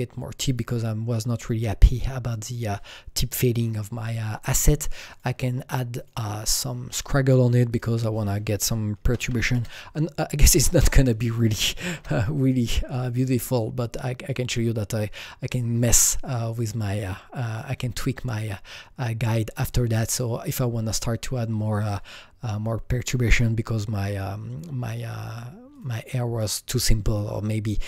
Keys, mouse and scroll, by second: 0.5 click, 5.1 KP_Enter, 5.1 click, 6.0 click, 7.7 click, 7.9 double click, 9.0 KP_0, 9.2 KP_Decimal, 9.4 KP_1, 9.5 KP_Enter, 10.7 click, 10.7 KP_1, 10.8 double click, 11.8 KP_1, 12.0 KP_Enter, 13.4 click, 15.5 click, 17.0-20.9 drag, 24.1-25.8 drag, 25.8 click.